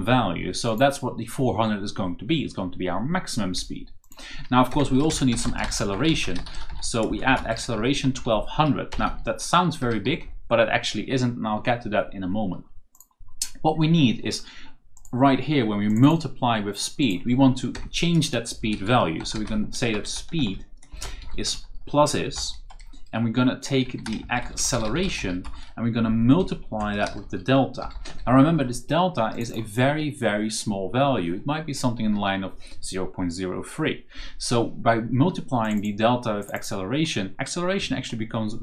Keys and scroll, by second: 4.8-9.7 typing, 17.6 Return, 18.9-20.8 typing, 22.2 shift+space, 23.5-25.5 typing, 26.3 KP_Multiply, 26.7-28.5 typing.